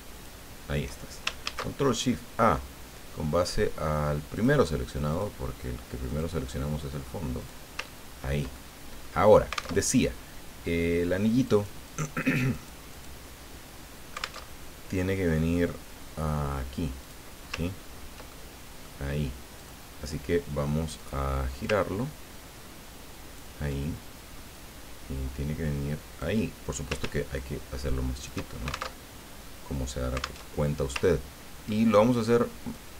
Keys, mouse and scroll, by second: 0.1 shift+click, 1.4 ctrl+shift+a, 3.4 click, 4.3 click, 5.1 click, 6.1 click, 7.4 click, 8.0-8.5 ctrl+scroll down 1, 8.6 ctrl+middle click, 9.8 alt+Tab, 11.5-12.8 drag, 12.9 click, 14.4 alt+Tab, 17.0 click, 17.8-18.5 ctrl+scroll up 2, 18.7 ctrl+click, 19.6 click, 21.0 click, 21.7-23.6 ctrl+drag, 24.5-26.4 drag, 27.3-28.7 ctrl+shift+drag, 29.0 ctrl+alt+shift+Tab, 30.5 alt+Tab, 31.1-31.6 ctrl+scroll up 2, 32.7-32.9 drag.